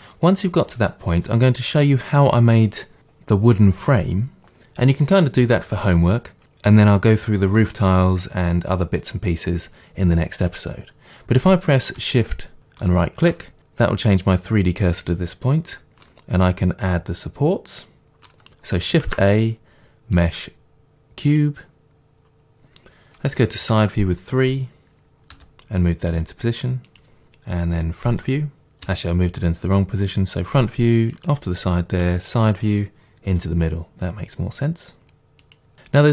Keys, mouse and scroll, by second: 12.9-16.1 shift+right drag, 16.1-27.0 middle drag, 19.1 shift+a, 23.6 KP_3, 25.4 g, 27.0 click, 28.2 KP_1, 28.9 g, 31.3 click, 32.1 KP_3, 33.3 g, 35.6 click, 35.7-36.1 middle drag.